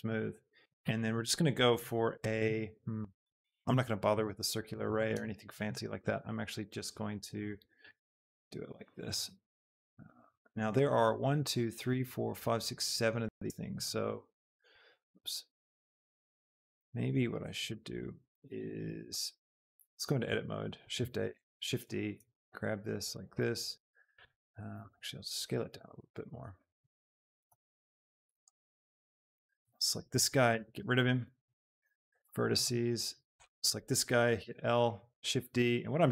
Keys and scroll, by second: 4.0 shift+KP_7, 4.8 shift+d, 5.1 Escape, 5.9 g, 7.7 shift+d, 8.1 Escape, 8.4 g, 13.9 x, 14.7 Escape, 15.4 ctrl+z, 16.1 z, 19.8 Tab, 20.2 a, 21.3 shift+d, 21.6 Escape, 22.4 g, 24.9 s, 25.7 g, 29.0 a, 30.4 l, 31.2 x, 34.5 l, 35.6 shift+d.